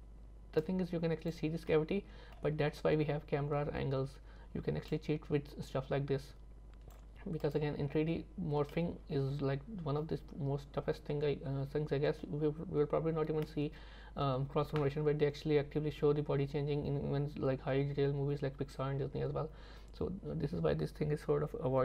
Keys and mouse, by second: 0.8 click, 1.8 middle click, 5.1-7.0 drag, 7.5 click, 8.8-12.3 middle drag.